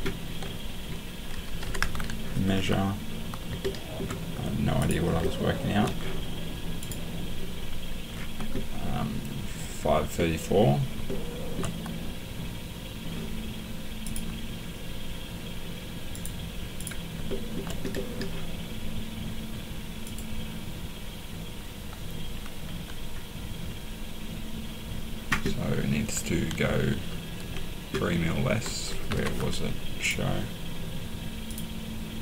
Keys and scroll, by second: 1.6 m, 29.1 Escape.